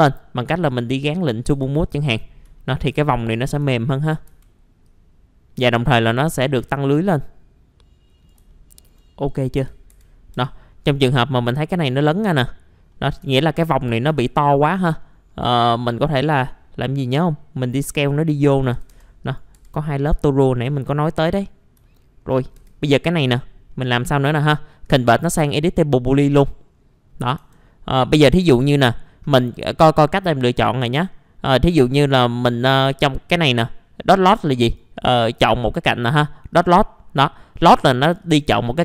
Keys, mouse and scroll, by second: 0.7 click, 1.5 F4, 2.1-2.4 scroll down 1, 2.6 alt+middle click, 3.8 alt+middle click, 4.8-8.4 drag, 9.3 scroll up 1, 9.6 F4, 10.7-11.7 scroll up 1, 11.7 click, 12.3-12.9 scroll down 1, 12.9 middle click, 13.3 alt+middle click, 13.9 scroll up 1, 15.0 middle click, 16.2-16.5 scroll up 1, 17.0 click, 18.5 alt+middle click, 19.2 click, 19.5 F4, 19.8-20.6 scroll down 1, 20.6 scroll up 1, 21.3 click, 22.1 alt+middle click, 22.4 scroll up 1, 22.5 F4, 22.9 middle click, 24.8 right click, 26.1 click, 26.7-27.4 scroll up 1, 27.4 scroll up 1, 28.0 click, 31.1 middle click, 31.7-38.8 drag.